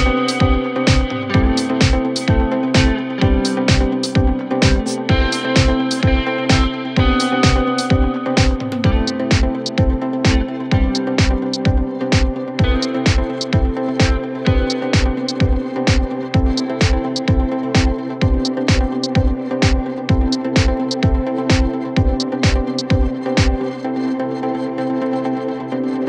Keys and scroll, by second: 18.9 F3, 19.1 Escape, 23.5 F3, 23.8 Escape.